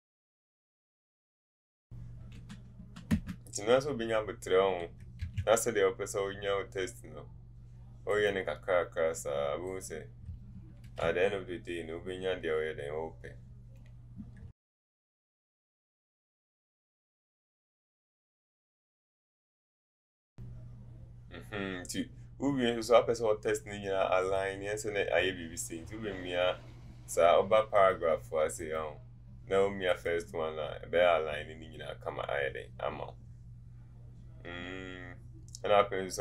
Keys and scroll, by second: 2.4 KP_1, 2.8 KP_7, 3.1 Return, 3.1 KP_3, 18.6 ctrl+a.